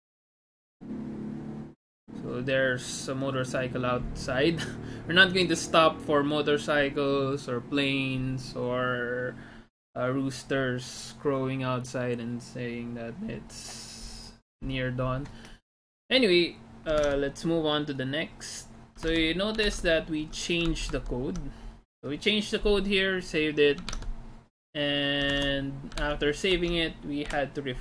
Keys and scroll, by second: 17.0 alt+Tab, 19.1 alt+Tab, 19.9 alt+Tab, 21.0 alt+Tab, 24.0 alt+Tab, 25.3 alt+Tab, 26.1 alt+Tab, 26.6 alt+Tab, 27.3 F5.